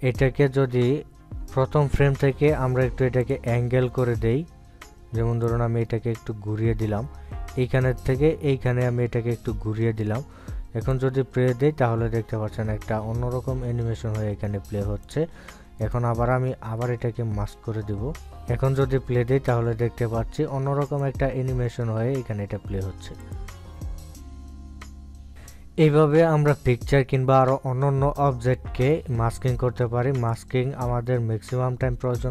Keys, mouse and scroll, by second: 4.1 click, 4.3 ctrl+scroll up 1, 5.4 click, 7.6-18.0 drag, 18.0 right click, 18.3-18.9 ctrl+scroll down 1, 20.8 click, 23.0 click, 25.3-32.3 drag.